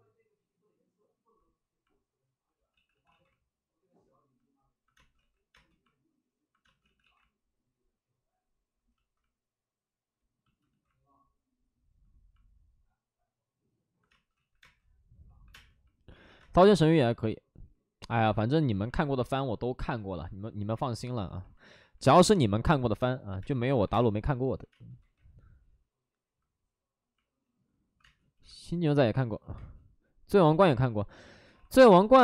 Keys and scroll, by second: 2.6 ctrl+z, 2.8 ctrl+z, 3.0 ctrl+z, 4.9 space, 5.1 ctrl+z, 5.5 space, 6.8 ctrl+z, 6.8 space, 11.2 ctrl+z, 12.5 ctrl+z, 14.0 space, 14.3 ctrl+z, 14.5 space, 15.4 space, 15.4 1, 21.9 space, 22.9-23.8 typing, 24.9 ctrl+z, 27.9 2, 28.3 1, 29.5 space, 31.2 ctrl+z, 31.5 alt+s, 31.7 space.